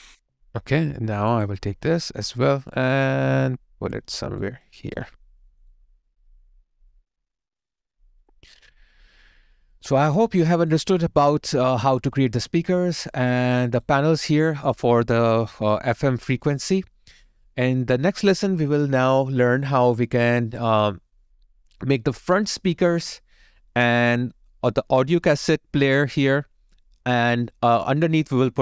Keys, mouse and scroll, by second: 4.1 alt+right click, 5.2 alt+middle click, 5.7 alt+right click, 8.9 alt+click, 9.3 alt+middle click, 9.7 alt+click, 10.8 alt+right click, 11.4 alt+middle click, 11.8 alt+click, 13.1 alt+right click, 15.9 alt+middle click, 16.4 alt+right click, 16.8 alt+middle click, 17.4 alt+click.